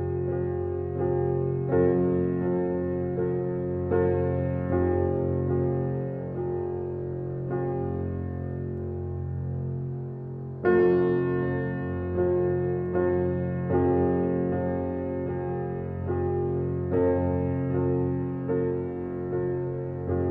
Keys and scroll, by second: 12.1 f.